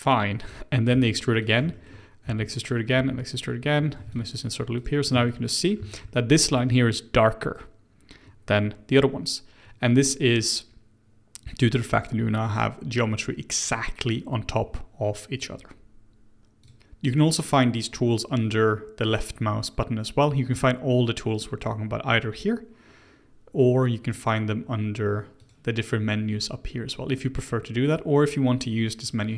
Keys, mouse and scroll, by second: 0.8 e, 1.7 shift+middle click, 2.2 e, 2.9 e, 4.0 ctrl+r, 4.7 click, 5.1-8.8 shift+middle drag, 16.4 middle click, 16.6 click, 25.4-28.6 drag.